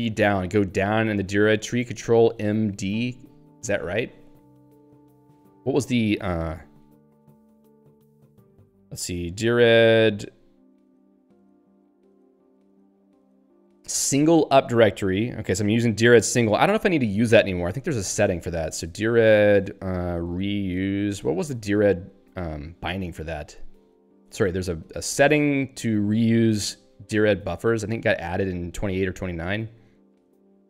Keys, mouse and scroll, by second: 0.0 Down, 1.1 g, 1.8 BackSpace, 2.9 ctrl+g, 5.4 Return, 6.4 Down, 6.7 Up, 8.1 Right, 9.3 Up, 9.7 Right, 10.0 Up, 10.9 Down, 11.2 Up, 11.4 Down, 12.6 Up, 18.6-21.2 typing, 24.2 ctrl+n, 28.3 ctrl+n, 28.9 ctrl+n, 29.9 ctrl+n.